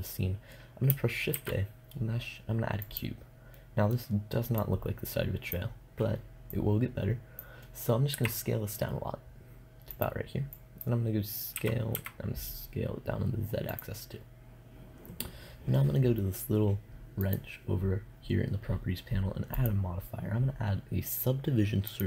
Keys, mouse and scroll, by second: 0.8 shift+a, 3.3-7.1 middle drag, 7.1 click, 7.2-9.4 middle drag, 7.6 s, 13.2 s.